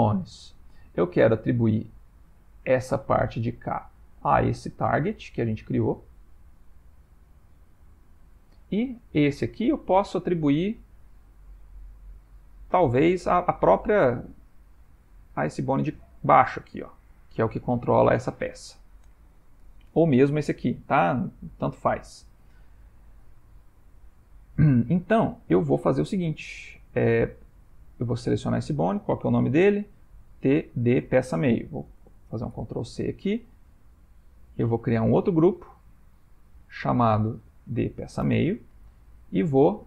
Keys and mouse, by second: 10.1 ctrl+middle click, 11.0 ctrl+middle click, 15.3 shift+middle click, 21.1 shift+middle click, 21.5 shift+middle click, 21.8 ctrl+middle click, 23.5 shift+middle click, 24.4 ctrl+middle click, 25.0 shift+middle click, 27.1 Tab, 27.7 click, 29.4 F2, 34.0 click, 35.5 click, 36.7 click, 36.8 click.